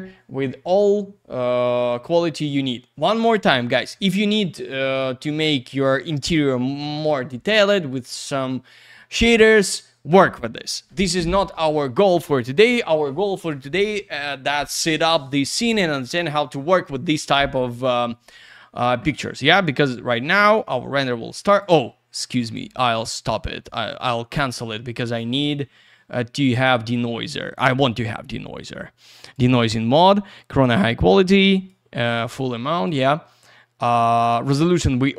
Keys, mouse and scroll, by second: 20.1 click, 22.4 click, 22.5 click, 25.1 click, 25.3 click, 29.2 click, 29.3 click, 30.2 click, 30.3 click, 31.4 click, 32.4 click, 35.0 click.